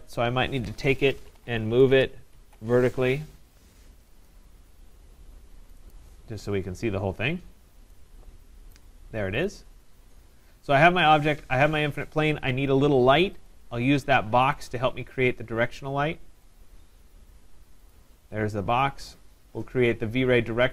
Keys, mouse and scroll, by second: 1.0-2.6 typing, 4.3 click, 5.9 click, 6.6 scroll, 6.7 Return, 6.7 scroll down 2, 7.1-7.6 scroll up 3, 8.8 right click, 9.5 click, 9.6 scroll, 13.5 click, 14.7 click, 16.6 click, 17.9 click.